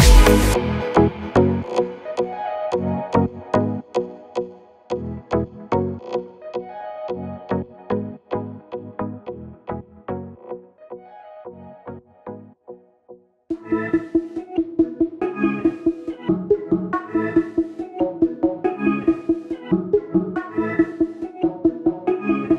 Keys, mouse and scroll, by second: 1.8 right click, 6.6 click, 7.3 right click, 9.6 click, 10.7 ctrl+s, 12.3-19.3 drag, 21.8-22.5 drag.